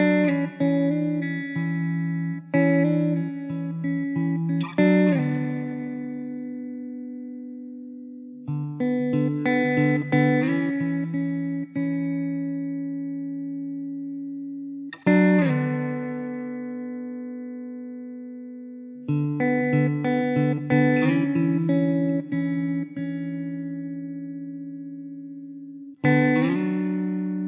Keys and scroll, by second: 9.6 KP_0, 10.5 s, 11.3 KP_0, 12.7 z, 14.0 shift+d, 14.9 r, 15.5 r, 18.1 KP_0, 18.5 `, 20.0 Delete, 21.2 shift+d, 24.0 ctrl+z, 25.2 ctrl+z, 27.2 KP_0.